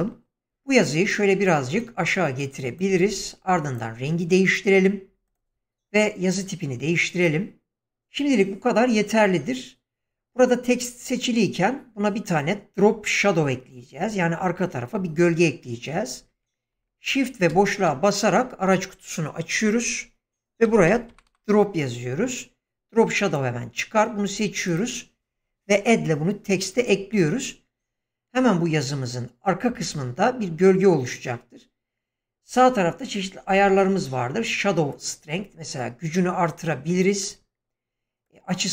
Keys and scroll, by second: 0.0-0.4 typing, 17.5 shift+space, 20.6-21.2 typing.